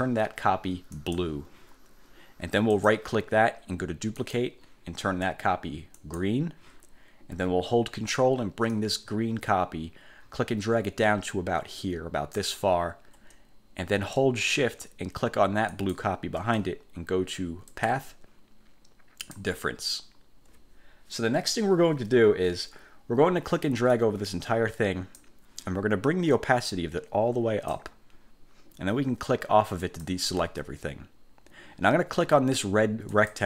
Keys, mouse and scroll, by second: 1.1 click, 2.9 click, 4.3 click, 6.1 click, 8.8-12.7 ctrl+drag, 15.9 shift+click, 17.9 click, 19.3 click, 24.1-25.5 drag, 26.7-28.1 drag, 29.9 click, 33.3 click.